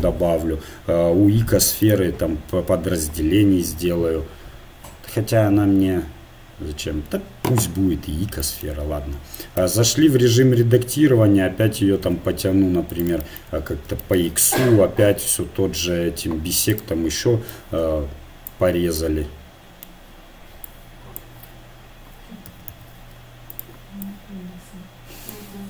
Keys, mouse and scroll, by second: 1.8-4.7 drag, 3.6-4.7 right drag, 7.8-9.5 middle drag, 9.5 Tab, 10.2 s, 16.7-18.5 drag, 19.0-20.1 middle drag, 20.6-22.3 drag, 22.5 a, 22.7 a, 23.5-25.2 drag.